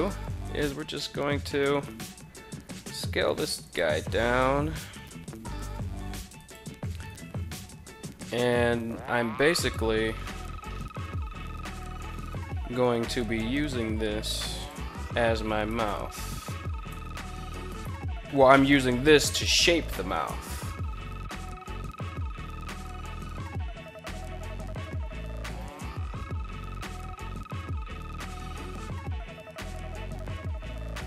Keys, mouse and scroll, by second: 1.4 right click, 2.1 s, 2.4 z, 3.1 click, 3.5 g, 4.6 z, 5.9 click, 6.4 s, 6.6 x, 9.0 click, 10.2 KP_3, 11.5 s, 11.8 y, 13.9 click, 15.1 right click, 16.3 g, 17.2 right click, 18.8 o, 19.8 g, 23.7 click, 24.0 middle click, 24.3 middle click, 24.4 right click, 24.8 KP_7, 25.5 g, 25.6 y, 27.3 click, 28.0 KP_3, 29.1-30.1 middle drag, 30.3 KP_3.